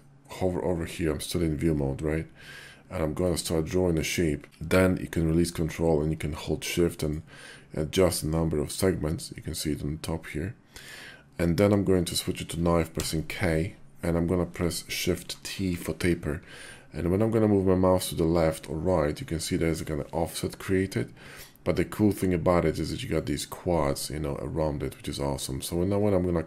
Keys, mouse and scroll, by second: 3.0-23.1 ctrl+drag.